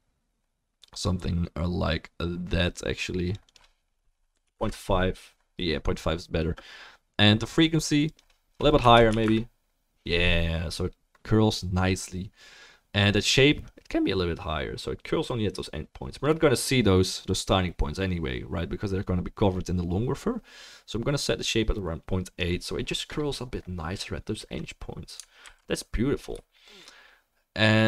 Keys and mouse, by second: 16.3-26.6 middle drag, 16.3-26.6 right drag, 25.4 ctrl+s.